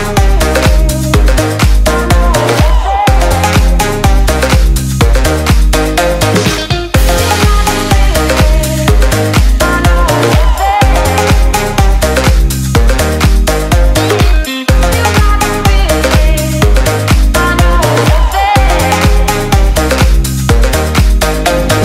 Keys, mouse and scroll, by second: 0.1 click, 2.2 click, 3.7 ctrl+s, 4.0 click, 4.4 ctrl+s, 4.9 s, 6.0 click, 7.4 s, 8.7 click, 13.7 click.